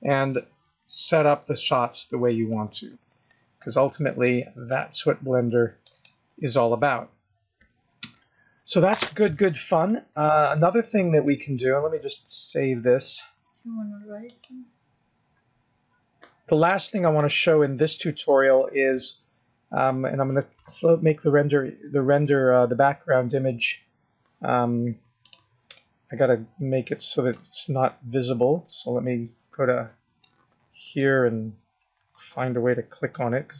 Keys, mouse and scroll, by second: 8.6-10.5 scroll down 4, 10.5-13.0 scroll down 3, 13.0 click, 17.1 click, 17.7-18.6 scroll up 9, 21.1 scroll down 4, 21.8-22.8 scroll down 4, 22.8-23.9 scroll down 8, 23.9-25.2 scroll up 2, 25.2 click, 25.2-25.7 scroll up 1, 25.7 middle click, 27.8-28.2 scroll up 5, 30.2 middle click, 33.1 middle click.